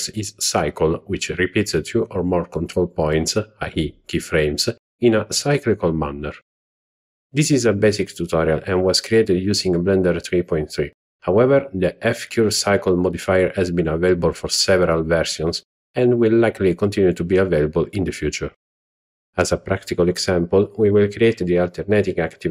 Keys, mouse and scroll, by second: 2.2 click, 2.6 click, 3.5 drag, 3.7 click, 4.9-5.4 drag, 8.8-9.1 drag, 9.6 click, 11.8-12.8 drag, 13.2 click, 14.9 click, 15.4 z, 16.4-17.6 drag.